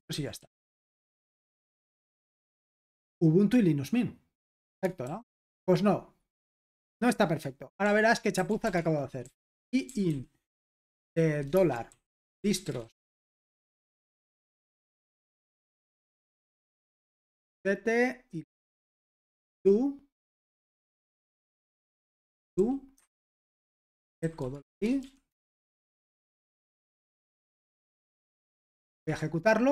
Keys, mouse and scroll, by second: 0.1-0.8 typing, 1.0 super+h, 1.6 ctrl+p, 2.2 Return, 5.0 super+l, 8.1-10.6 typing, 11.7-13.8 typing, 14.8-17.2 typing, 19.2-20.0 typing, 20.8 Return, 21.5-22.6 typing, 22.9 Escape, 23.7-27.9 typing, 28.1 super+h, 28.7 ctrl+p, 29.1 Return.